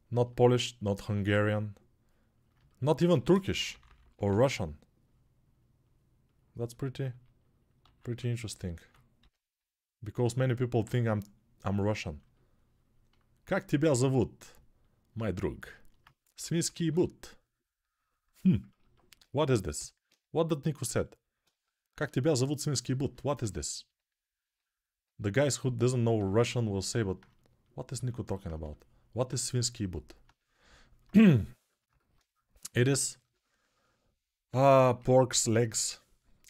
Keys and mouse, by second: 0.7-15.4 drag, 0.8 1, 2.9-4.0 typing, 7.8 alt+q, 8.9 g, 15.4-19.5 alt+right drag, 16.1 6, 16.4 [, 16.6 [, 16.7 [, 19.5-36.4 alt+drag, 19.5 g.